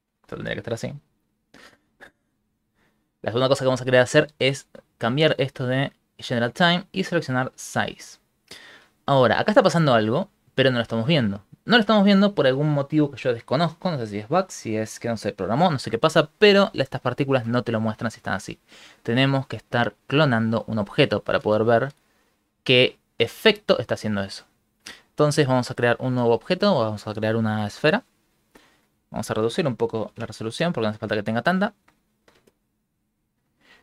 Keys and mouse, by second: 1.7 middle click, 2.0 middle click, 2.1 middle click, 2.9 middle click, 3.0 middle click, 6.5 click, 7.8 click, 21.3 space, 21.4 space, 23.2 middle click, 26.1 shift+a, 28.0 a.